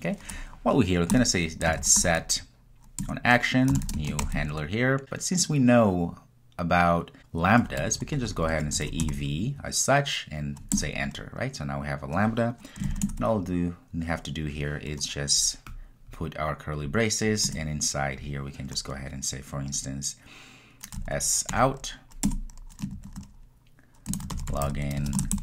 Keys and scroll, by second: 3.1 Return, 10.8 Return, 22.4 Return.